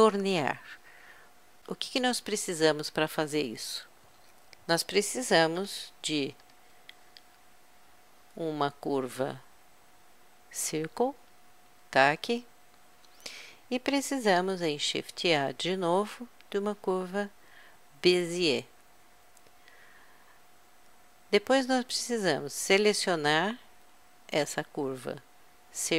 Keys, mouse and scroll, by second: 6.8 shift+a, 14.7 shift+a, 24.3-25.9 drag.